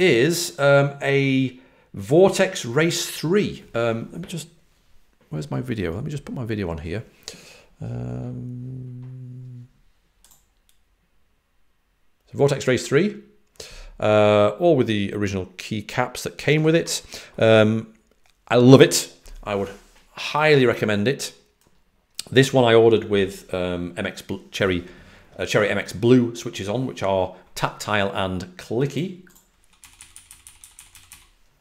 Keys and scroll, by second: 29.7-30.5 typing.